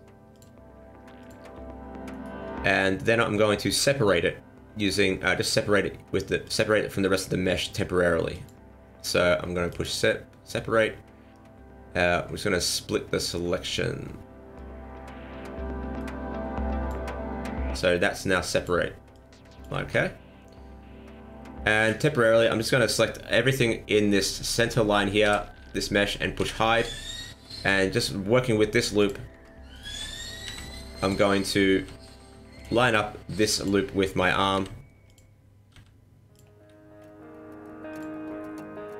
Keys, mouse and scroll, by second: 0.3 click, 1.2 click, 2.1 alt+right click, 6.4 click, 8.3 click, 9.7 click, 17.8 click, 19.1 click, 19.8 ctrl+z, 20.4-21.3 scroll down 2, 21.3-21.8 scroll up 1, 21.8 right click, 25.2 l, 26.4 h, 29.0 click, 29.7 alt+right click, 30.4 s, 31.8 g, 32.8 r, 34.5 s, 35.7 g, 36.8-37.6 scroll up 1, 37.9 click.